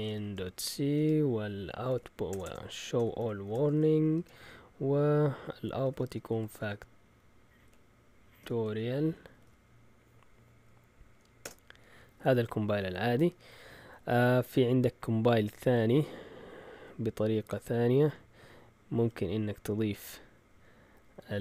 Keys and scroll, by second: 0.0-4.4 typing, 5.4-9.9 typing, 11.2-11.9 typing, 18.1 Left, 18.7-19.5 typing, 18.9 Left, 19.0 Left, 20.6 typing.